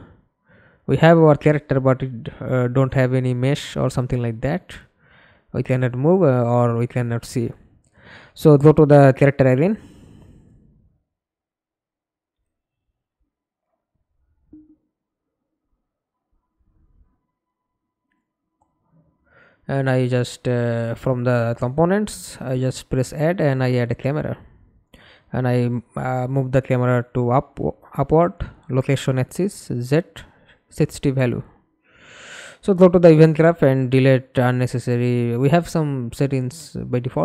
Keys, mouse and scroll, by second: 0.5 Escape, 0.9 middle click, 1.7 F11, 2.5 middle click, 3.0 ctrl+space, 12.9 double click, 13.2-14.8 typing, 20.8-21.3 typing, 21.4 Return, 28.3 right click, 30.6 Delete, 32.0 right click, 34.2 right click.